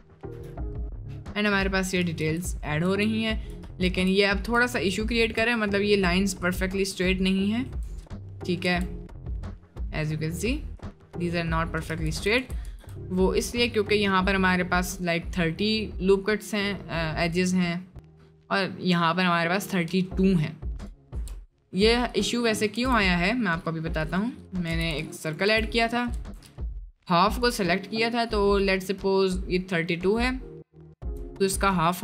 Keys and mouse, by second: 0.4 Tab, 0.6-1.0 middle drag, 2.2 ctrl+z, 5.1 shift+middle click, 5.6 middle click, 6.0 middle click, 6.7 middle click, 7.5 middle click, 7.7 Tab, 8.3 middle click, 9.0-10.1 middle drag, 10.2 middle click, 11.0 middle click, 12.0 ctrl+z, 13.2 middle click, 13.8 middle click, 16.7 middle click, 17.7 middle click, 20.1 middle click, 21.2 Tab, 22.1 click, 22.9 shift+a, 24.7 g, 25.5 Tab, 25.9 click, 26.2 1, 26.5 click, 28.7 click.